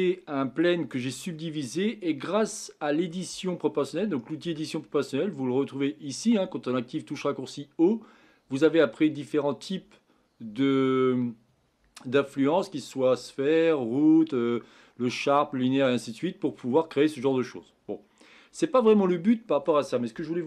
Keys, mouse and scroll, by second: 0.1 middle click, 0.9-1.3 scroll down 3, 1.3-4.6 middle drag, 4.6 Tab, 8.5 click, 8.9-12.1 drag, 16.7-19.7 middle drag, 20.2-20.4 middle drag.